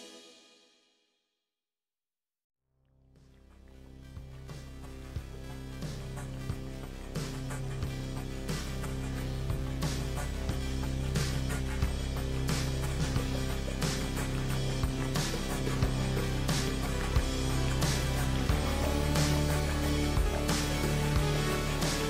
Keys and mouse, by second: 3.5 g, 6.7 g, 9.6 g, 15.4 ctrl+r, 18.5 click, 19.1 g.